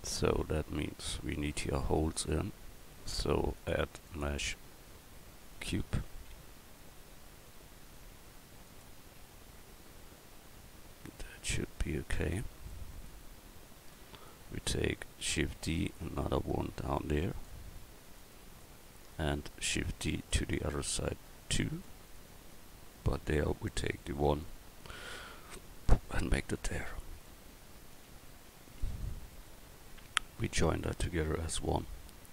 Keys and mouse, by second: 1.5-2.8 middle drag, 6.3 s, 9.2 s, 12.7 middle drag, 15.2 shift+d, 20.1 shift+d, 21.8 click, 23.9 right click, 24.8 middle click, 27.3 middle click.